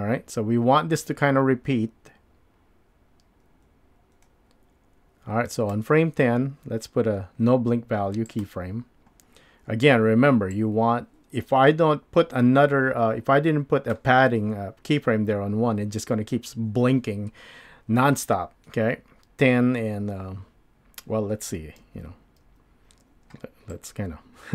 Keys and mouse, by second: 8.3 click, 10.5-13.3 drag, 13.6 drag, 21.8 super+z, 22.5 super+z, 23.7-24.5 drag.